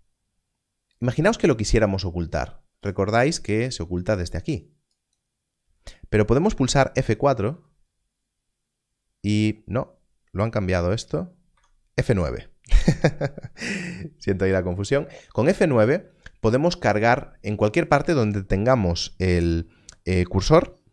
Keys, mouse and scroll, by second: 2.8 click, 4.9 click, 7.4 F4, 11.5 F4.